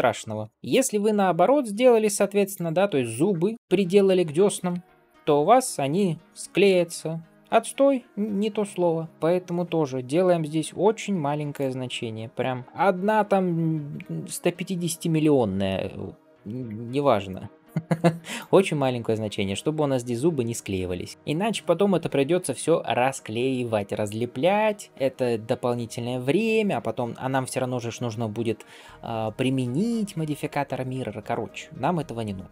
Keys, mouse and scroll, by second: 0.4 shift+middle click, 0.8-2.5 drag, 3.0-3.5 scroll up 1, 3.5 shift+click, 5.1 ctrl+j, 11.4-18.6 drag, 12.6 KP_0, 18.7-19.1 scroll up 2, 19.5-20.2 scroll up 1, 20.2-20.7 scroll down 2, 21.1-22.1 scroll down 1, 25.8-26.4 scroll up 1, 26.4 scroll down 2, 28.3-28.8 scroll up 1, 28.8-29.2 scroll up 1, 29.2-29.5 scroll down 2, 32.4-32.5 scroll down 1.